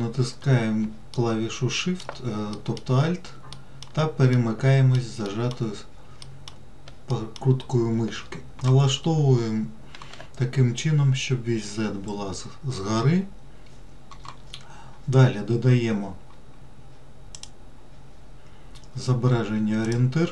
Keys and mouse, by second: 1.5-2.4 shift+middle drag, 2.9 alt+middle click, 3.9 alt+middle click, 4.7-5.4 alt+middle drag, 5.6 alt+middle click, 6.5 alt+middle drag, 7.5 alt+middle drag, 17.7-20.3 drag.